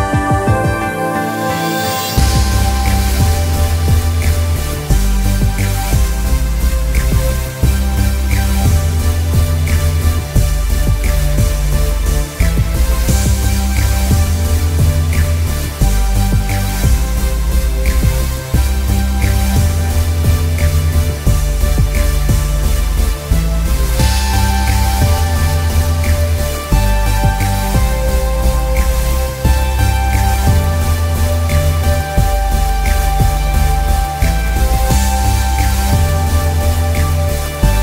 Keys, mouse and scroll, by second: 16.6 shift+click, 19.7 click, 24.4-25.1 scroll down 1, 25.4 shift+click, 28.5-29.1 alt+scroll down 1, 29.4 space, 29.6 click, 29.9 space, 30.4 click, 32.2 alt+scroll down 1, 32.9 space, 33.1 click, 33.4 space, 34.9 alt+scroll up 1, 36.1-37.5 scroll up 1.